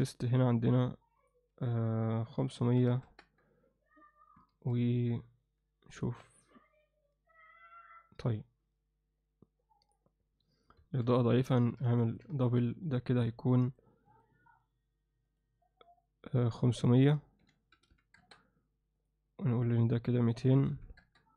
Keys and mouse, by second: 0.3 click, 0.7 click, 1.2-3.3 drag, 2.9 0, 4.5 ctrl+s, 10.8 KP_0, 11.8 KP_7, 12.0 ctrl+alt+middle click, 12.3 alt+shift+middle drag, 13.7 click, 14.1 click, 15.2 click, 16.3 drag, 17.0-18.3 drag, 17.9 0, 19.0 drag, 19.6-21.1 drag, 20.7 0.